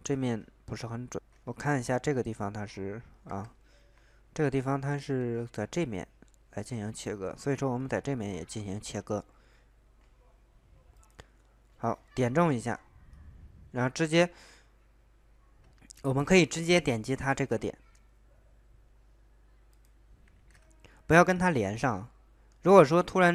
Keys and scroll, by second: 0.2 ctrl+z, 1.6 alt+Tab, 1.8 ctrl+z, 3.9 alt+Tab, 4.8 ctrl+z, 20.3 ctrl+z.